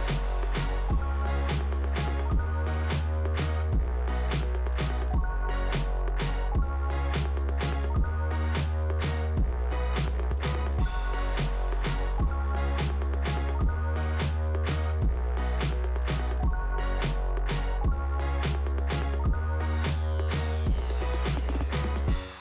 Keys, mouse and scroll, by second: 0.2 scroll down 1, 3.0 middle click, 4.2 click, 4.2 middle click, 4.3 click, 5.8 click, 6.0 click, 10.9 click.